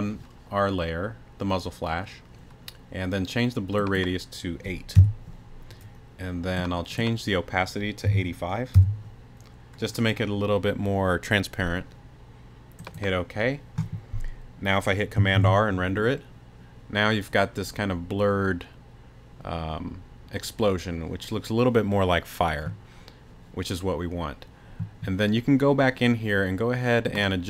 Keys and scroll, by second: 5.0 8, 8.0 8, 8.7 5, 15.3 super+r.